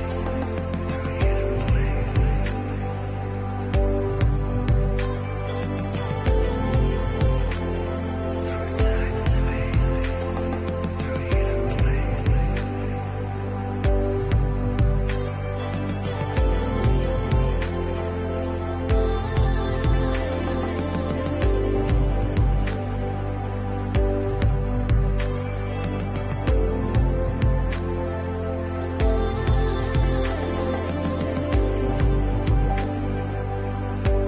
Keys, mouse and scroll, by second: 0.6 middle click, 1.1 right click, 4.0 Tab, 5.5 right click, 7.2 shift+middle click, 8.4 l, 9.1 u, 9.3 u, 10.8 middle click, 12.0 h, 14.5 middle click, 15.1 shift+middle click, 15.6 middle click, 16.5 scroll down 2, 16.8 shift+middle click, 17.6 middle click, 19.6 alt+click, 20.8 alt+shift+click, 22.0 alt+click, 23.2 alt+shift+click, 26.4 middle click, 27.6 alt+shift+click, 32.1 middle click, 33.5 scroll up 3.